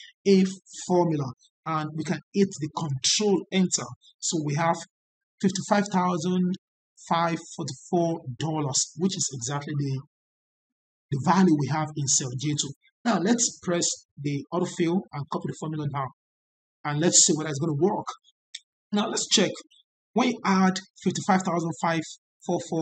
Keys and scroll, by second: 2.9 ctrl+Return.